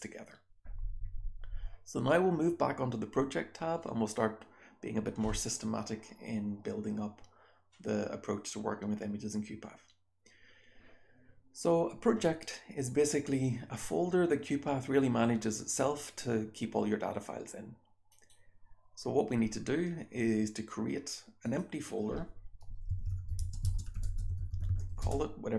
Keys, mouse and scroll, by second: 18.0 scroll down 1.